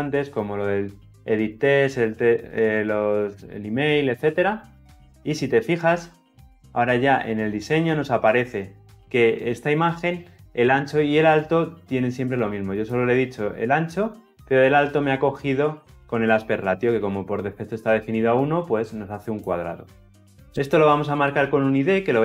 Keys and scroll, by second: 5.8 ctrl+alt+Left.